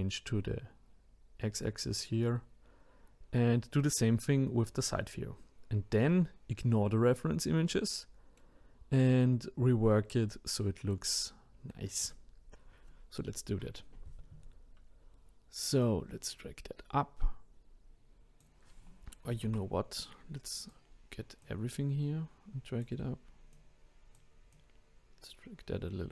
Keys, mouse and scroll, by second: 7.7-12.0 middle drag, 12.0-15.0 drag, 15.8 click, 19.3 ctrl+z, 19.9 click, 21.4 click, 23.5 click, 24.5 click.